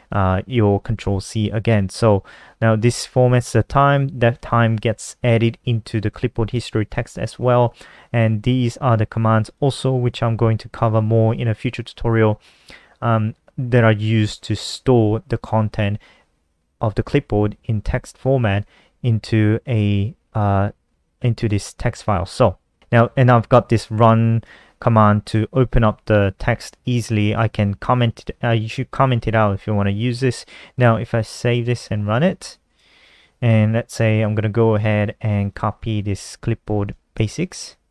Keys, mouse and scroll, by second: 2.5 click, 5.9 click, 8.5 click, 21.1 click, 22.8 click, 27.4 KP_Subtract, 28.5-29.2 typing, 30.4 click, 30.7 ctrl+s, 31.5 F5, 32.4 click, 34.9-35.7 typing, 36.9 ctrl+c.